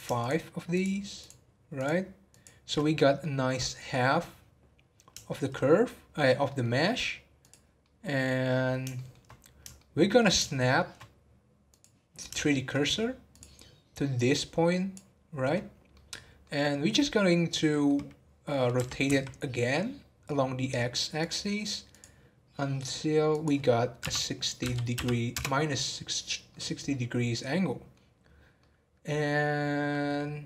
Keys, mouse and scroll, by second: 0.1 alt+shift+click, 0.7 alt+shift+click, 1.1 alt+shift+click, 1.7 alt+shift+click, 2.3 alt+shift+click, 2.9-4.6 middle drag, 4.6-5.3 scroll down 2, 5.3-7.4 shift+middle drag, 7.4 click, 7.8 middle click, 8.7 scroll up 2, 8.9 shift+middle click, 9.2-9.7 scroll up 1, 9.7-11.7 shift+middle drag, 11.7 click, 12.3 shift+middle click, 13.3 click, 14.1-15.5 drag, 15.5-16.2 scroll down 4, 15.9 middle click, 16.4 middle click, 16.9-17.6 scroll up 1, 17.7-18.7 middle drag, 18.7 r, 21.9-26.3 drag, 26.5-28.0 middle drag, 28.0-28.5 scroll down 1, 28.5-30.4 middle drag.